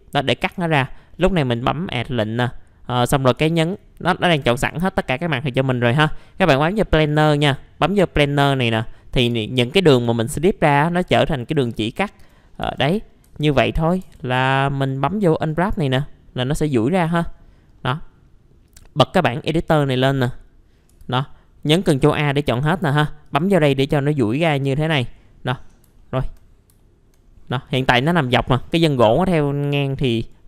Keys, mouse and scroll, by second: 4.3 F2, 8.2 click, 11.8 alt+middle click, 12.6 F3, 12.9 middle click, 13.1 scroll down 1, 13.2 F2, 14.0 F3, 14.4 middle click, 15.3 click, 17.0 F2, 17.3-17.8 scroll up 1, 17.8 middle click, 18.6 click, 21.0 ctrl+a, 22.1 click, 25.2 middle click, 25.6 scroll down 1, 25.9 alt+middle click, 26.4 scroll up 1, 27.2-29.0 scroll up 1, 29.0-29.4 scroll down 1, 29.4 middle click, 30.2 right click.